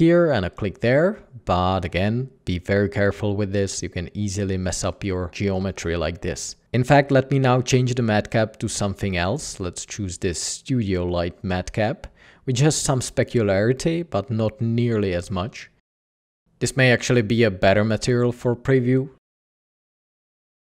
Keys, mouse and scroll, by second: 2.0 ctrl+z, 14.1 ctrl+z, 20.4 typing, 20.5 Return.